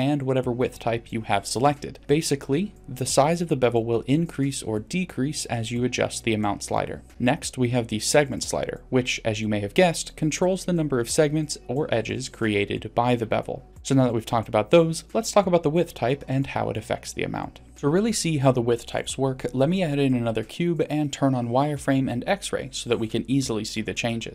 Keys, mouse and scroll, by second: 0.3 middle click, 0.6 click, 2.0-3.1 drag, 3.7 middle click, 4.5 click, 7.6 click, 8.3 click, 8.8 click, 13.0-13.6 drag, 18.0 click, 18.5 click, 21.5 shift+a.